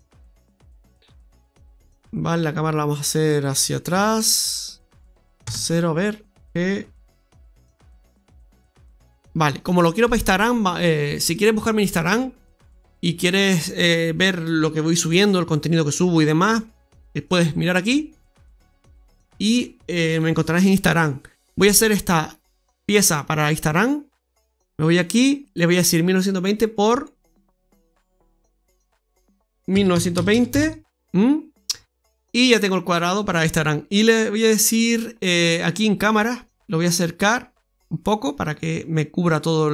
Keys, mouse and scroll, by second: 1.0 scroll down 2, 1.2 middle click, 1.8-3.1 scroll down 7, 3.1-3.8 scroll down 1, 3.8 g, 5.3 KP_0, 6.3 g, 8.7-9.7 scroll up 5, 23.1 click, 24.4 click, 25.3 click, 27.0 click, 29.9 click, 35.9 click, 37.2 click.